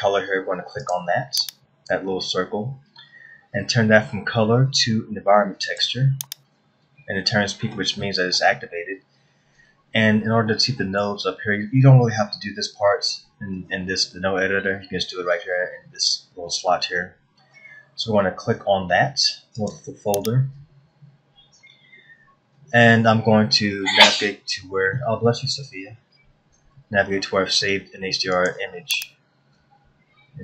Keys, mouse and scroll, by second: 1.8 click, 11.1 middle click, 20.2 click.